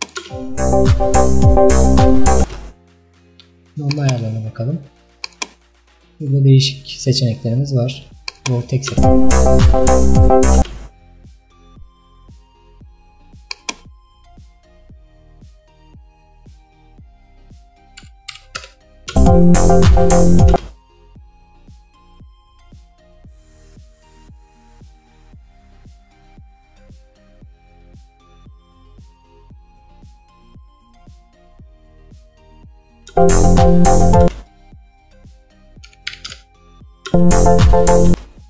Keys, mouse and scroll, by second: 0.3 space, 2.5 space, 8.4 click, 8.9 space, 10.7 space, 13.5-19.2 drag, 19.2 space, 20.6 space, 30.4-33.2 drag, 33.2 space, 34.3 space, 36.4 click, 37.2 space, 38.2 space.